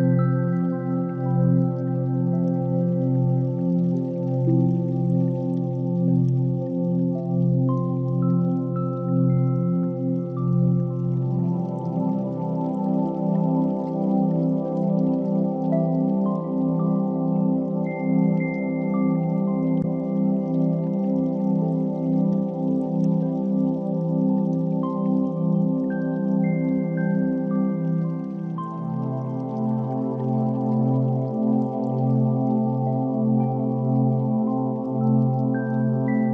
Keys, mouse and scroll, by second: 1.1 r, 6.1 KP_3, 7.1 s, 10.2 s, 12.3 g, 13.6-14.1 scroll up 2, 14.1 s, 14.8 r, 15.6 g, 17.4 r, 18.2 g, 19.3 r, 20.6 KP_1, 21.5 s, 27.5-31.5 shift+middle drag, 31.5 s, 34.3 middle click, 35.0 KP_3, 35.8 g.